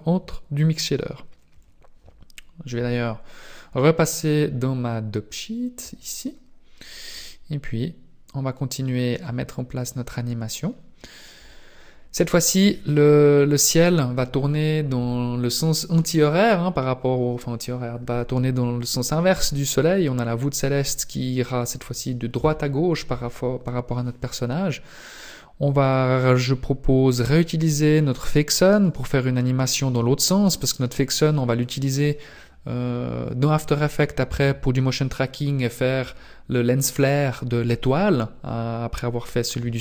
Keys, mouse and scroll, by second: 9.3 click, 10.1-10.4 scroll down 3, 10.7 scroll down 1, 13.0 right click, 13.0-13.6 scroll down 1, 25.8 right click, 27.3 middle click, 28.7 right click.